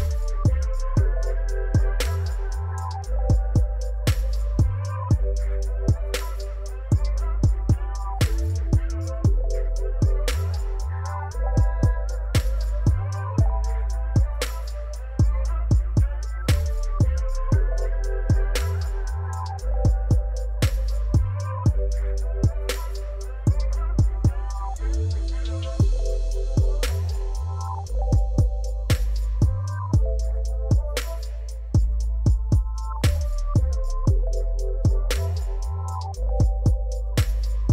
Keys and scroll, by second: 2.3 shift+d, 3.9 shift+d, 5.8 shift+z, 6.8 alt+a.